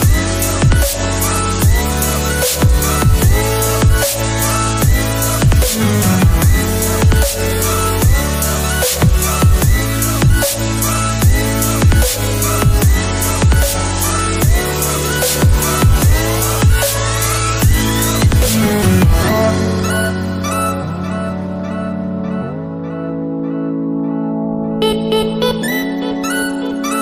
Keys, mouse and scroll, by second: 16.6 alt+Tab, 19.1 double click, 20.6 typing, 23.1 double click, 24.4 typing.